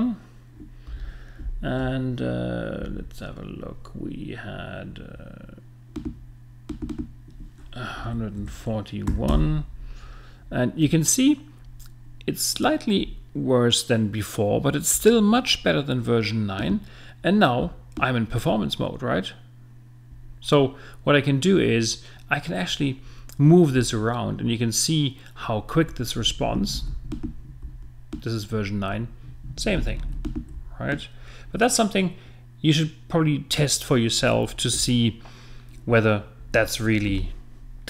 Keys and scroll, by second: 8.0 l.